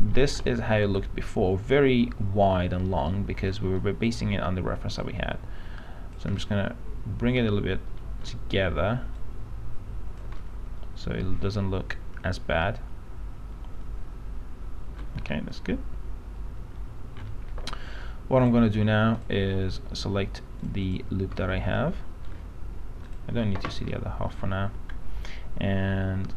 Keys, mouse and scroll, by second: 0.0 alt+middle click, 3.2 alt+middle click, 5.2 click, 7.0-8.4 alt+middle drag, 9.4 click, 10.6-18.1 alt+middle drag, 18.6 click, 21.6 alt+middle click, 23.2 click, 24.1-25.3 alt+middle drag.